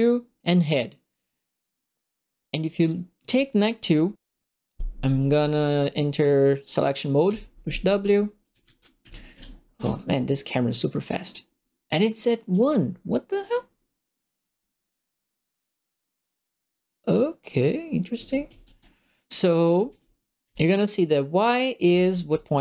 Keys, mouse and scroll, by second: 6.1 right click, 7.2 w, 8.3-10.2 typing, 8.4-9.9 right drag, 12.5 click, 15.0-17.1 right drag, 17.8-20.7 right drag, 17.8-20.4 typing, 21.5-22.5 typing, 21.7 right click.